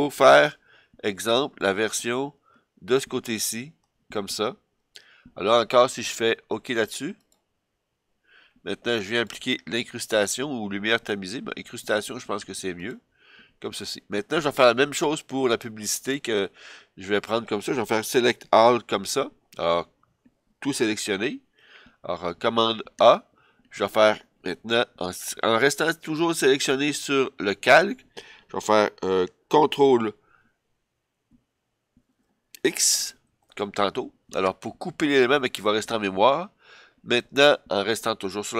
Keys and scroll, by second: 21.1 super+a, 33.0 super+x.